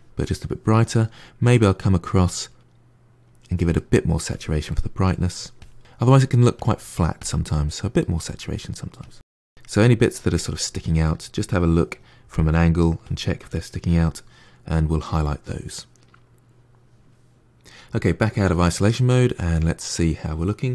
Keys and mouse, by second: 3.1 click, 3.6 middle click, 4.1 click, 4.6 middle click, 5.5 click, 5.7 middle click, 6.0 click, 6.2 middle click, 7.0 click, 7.4 middle click, 8.0 click, 8.4 middle click, 8.7 click, 8.9 middle click, 9.1 click, 9.4 middle click, 10.2 click, 10.5-12.9 middle drag, 12.9 click, 13.3 middle click, 13.7 click, 14.0-17.0 middle drag, 18.3 KP_Divide, 18.8-20.7 middle drag.